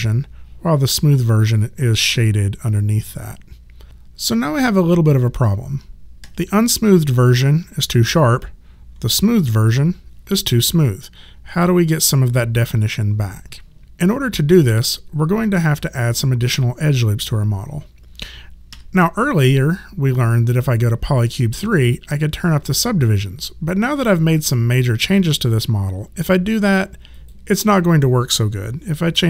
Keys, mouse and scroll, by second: 6.2 1, 8.9 3, 18.7 1, 21.0 click, 27.1 click.